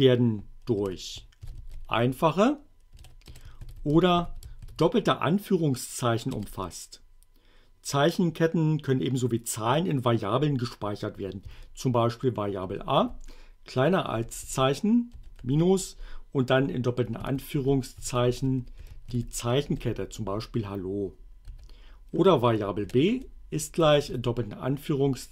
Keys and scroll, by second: 1.2-2.6 typing, 3.3 shift+Return, 3.6 shift+2, 4.2 shift+r, 4.6 shift+2, 6.4 Return, 11.5 a, 12.7 space, 13.0 c, 14.1 BackSpace, 14.5 <, 15.2 -, 15.4 space, 17.2-19.6 typing, 19.7 Return, 21.4-24.1 typing.